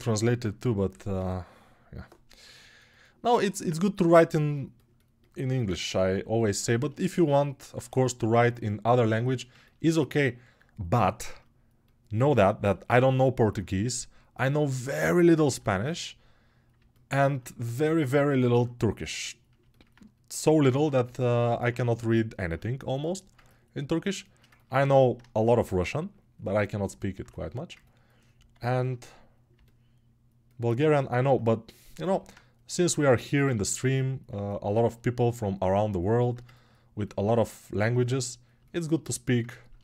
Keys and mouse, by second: 0.4 g, 3.4-23.3 drag, 23.3-31.8 alt+right drag, 31.8-39.8 alt+drag.